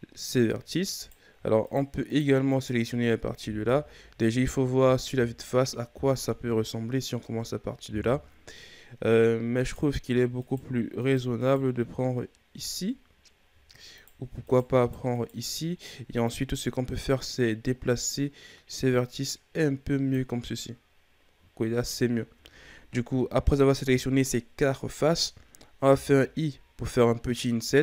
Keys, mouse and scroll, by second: 0.2-1.0 scroll up 3, 1.0 right click, 1.6 shift+right click, 2.1 shift+right click, 2.5 shift+right click, 3.6 KP_1, 7.1 KP_3, 9.5 right click, 10.4 shift+right click, 11.0 shift+right click, 11.4 shift+right click, 12.0-12.3 scroll down 3, 12.6-13.9 scroll up 3, 13.9 right click, 14.4 shift+right click, 14.8 shift+right click, 15.1 shift+right click, 16.2-19.3 drag, 20.5-21.1 scroll down 4, 21.1-22.0 scroll up 5, 22.0 shift+scroll up 2.